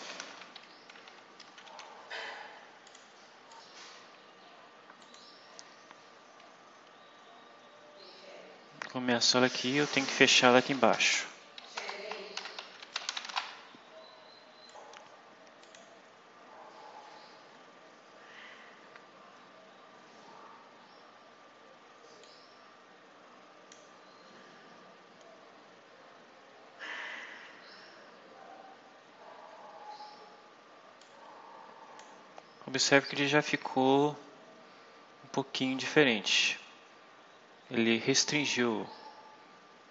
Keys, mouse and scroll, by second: 0.0 shift+., 1.0 shift+Home, 2.8 click, 3.4 click, 5.0 click, 5.9-8.1 scroll down 12, 8.6-9.2 scroll down 4, 10.0 click, 10.7 Return, 11.7-13.7 typing, 14.6 click, 15.6 click, 16.3-17.4 scroll up 6, 18.1 scroll up 2, 18.7 scroll up 2, 19.3 scroll up 2, 19.8 scroll up 2, 20.7 scroll down 2, 22.2-23.8 drag, 28.8 scroll up 1, 30.9-32.1 drag, 33.7-34.0 scroll down 1, 34.6-35.3 scroll up 4.